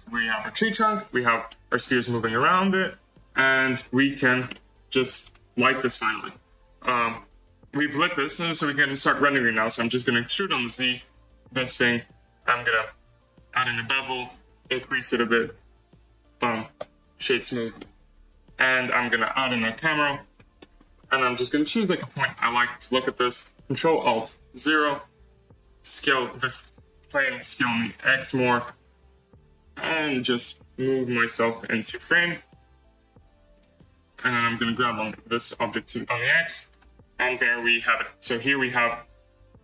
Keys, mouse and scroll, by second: 0.2-0.5 middle drag, 0.5-0.9 scroll up 4, 0.9 scroll down 4, 1.1 space, 1.4-2.1 middle drag, 2.1 space, 2.5-4.2 middle drag, 4.2 scroll down 5, 4.4-5.6 middle drag, 5.6 space, 6.0 space, 7.0 click, 7.7 Tab, 8.5 2, 8.7 click, 9.7 e, 14.2-16.7 drag, 16.7 Tab, 17.5 right drag, 17.7-20.2 middle drag, 20.2 shift+a, 20.5-20.9 middle drag, 20.9 scroll, 21.0-24.4 middle drag, 24.4 ctrl+alt+KP_0, 26.0 click, 26.6 click, 27.4 s, 30.1 click, 30.8 g, 33.5 drag, 34.7 g, 36.6 click, 36.7 space, 37.4 z, 38.1-38.8 scroll up 4, 39.1 scroll down 2.